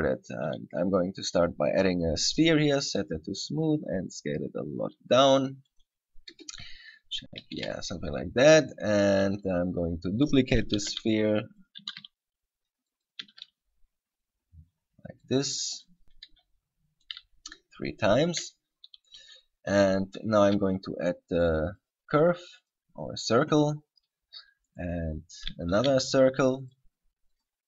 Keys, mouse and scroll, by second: 3.1 click, 3.9 s, 6.0 click, 6.5 KP_0, 7.8 KP_7, 8.3-8.7 scroll up 6, 9.1 scroll down 2, 9.5-9.9 scroll up 3, 10.1-10.5 scroll down 2, 11.0 shift+d, 11.9 click, 12.1 shift+d, 13.4 click, 13.5 shift+d, 15.5 click, 15.9 right click, 16.5 g, 17.3 click, 18.3 scroll down 1, 19.3 right click, 20.5 shift+a, 24.9 right click, 25.9 shift+a.